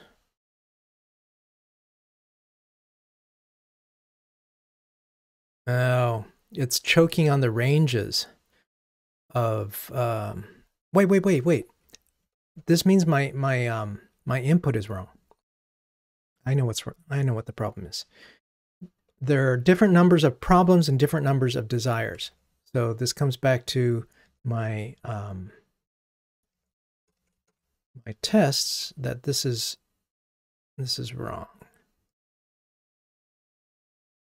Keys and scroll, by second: 17.1 super+F2, 22.4 ctrl+Tab.